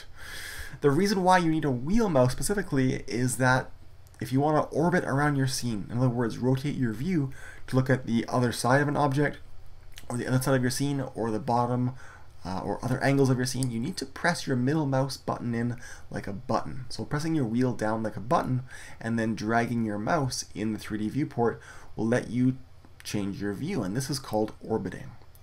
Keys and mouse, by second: 19.3-20.4 middle drag, 23.3-25.4 middle drag.